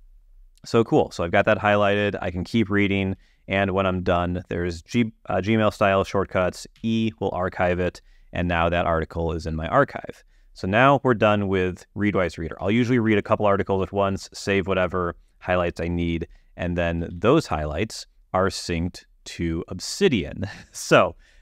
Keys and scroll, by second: 1.6 Down, 3.0 Down, 3.6 Down, 7.0 e, 12.8 Down, 13.3 Up, 17.3 super+h.